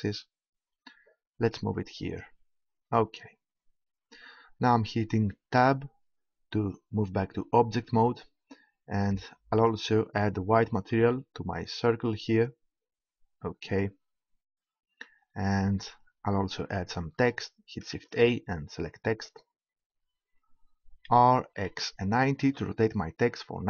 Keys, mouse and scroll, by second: 2.2-3.2 drag, 5.5 Tab, 9.5-11.4 drag, 18.0 shift+a, 21.0 r.